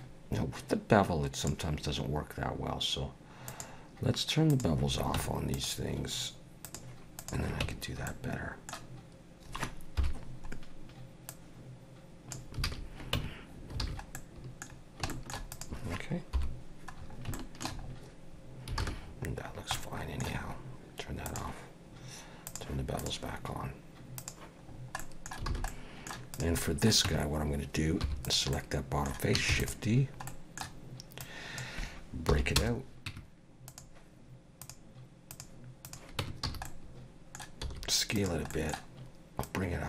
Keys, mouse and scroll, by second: 3.5 click, 4.5 click, 5.1 Tab, 5.5 click, 6.6 click, 7.2 click, 7.6 Tab, 8.1 middle click, 10.0 KP_7, 11.3 click, 12.6 alt+a, 13.2 Tab, 13.5 scroll down 2, 13.8 alt+a, 14.1 middle click, 14.7-15.0 scroll down 2, 15.1 shift+middle click, 15.5 click, 16.3 KP_7, 17.0 scroll up 3, 17.3 shift+middle click, 17.8-18.3 scroll up 2, 18.8 alt+a, 19.0-19.7 scroll down 5, 19.7 middle click, 21.3 click, 22.5 click, 23.0 click, 24.2 click, 24.7 scroll down 2, 25.0 middle click, 25.5 alt+a, 25.7 middle click, 26.3 click, 26.6 middle click, 27.1 Tab, 28.0 3, 28.2 click, 28.5 middle click, 29.5 shift+d, 30.3 middle click, 31.2 click, 32.3 p, 33.1 Tab, 33.7 click, 34.6 click, 36.2 Tab, 36.5 a, 36.7 middle click, 37.6 s, 38.5 middle click, 39.4 click.